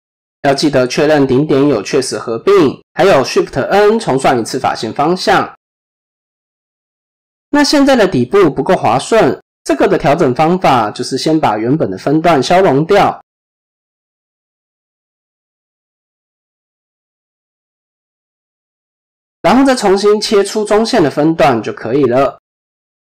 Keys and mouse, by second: 3.4 shift+n, 5.8 ctrl+KP_7, 6.8 shift+middle click, 10.3 click, 12.9 x, 15.4 alt+click, 17.6 x, 19.8 ctrl+r, 22.1 ctrl+b.